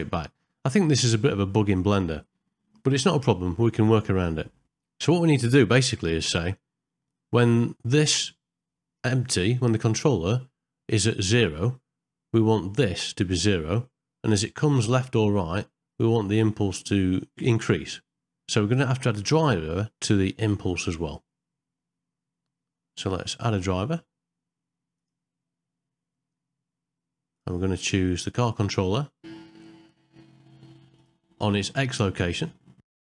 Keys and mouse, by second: 23.3-33.0 right drag.